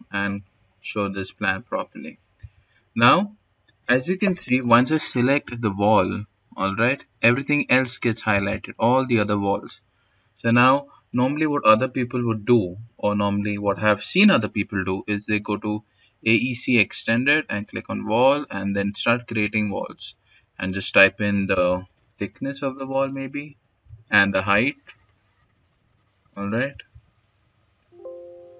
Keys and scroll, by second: 20.1-21.5 typing, 23.5-25.8 typing, 27.4 s.